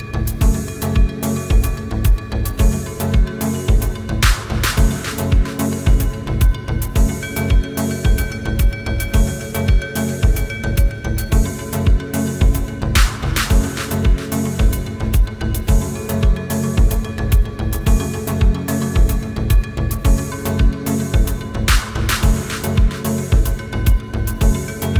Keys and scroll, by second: 20.1 v.